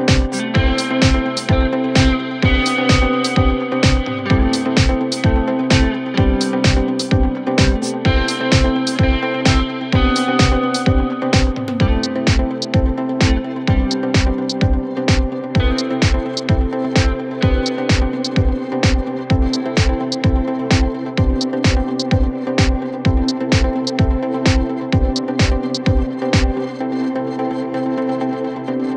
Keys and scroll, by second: 23.7 shift+Page_Down, 24.1 w, 25.4 F3, 26.0 Escape.